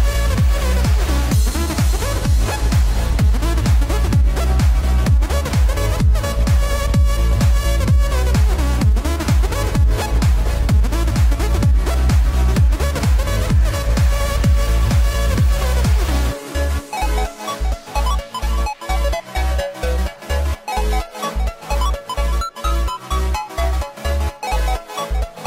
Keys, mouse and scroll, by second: 4.8 click, 6.0 g, 7.8 g, 12.0 click, 12.7 r, 13.7 drag, 14.0 g, 19.9 alt+r, 22.8 g, 23.9-24.3 drag, 24.4 g.